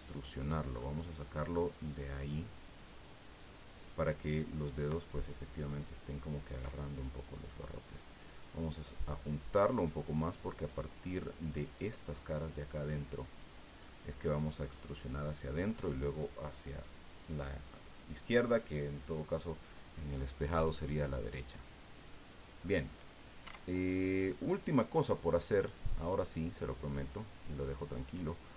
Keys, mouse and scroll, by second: 0.8 middle click, 2.2-3.7 drag, 6.8 middle click, 6.9 scroll up 1, 9.2-11.5 drag, 13.8-15.9 middle drag, 20.2 scroll down 1, 21.6-22.8 middle drag, 22.8-23.1 scroll down 1, 23.4 Tab, 24.3 right click, 26.0 click, 28.1 click.